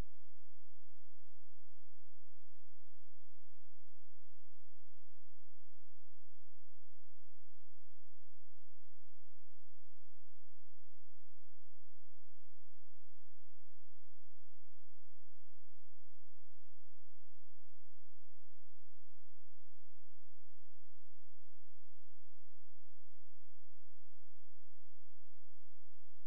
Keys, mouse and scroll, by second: 10.5 space, 12.5 click, 14.9 click, 24.0 space, 24.3 click.